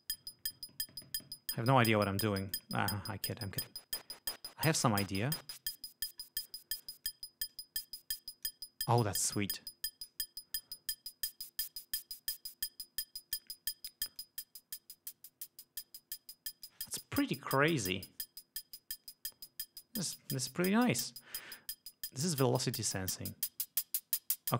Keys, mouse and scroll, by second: 2.7 click, 3.6-5.2 drag, 5.6 click, 7.0 click, 7.7-8.9 drag, 9.6 click, 10.8-13.8 drag, 14.4-17.1 drag, 23.0-24.5 drag.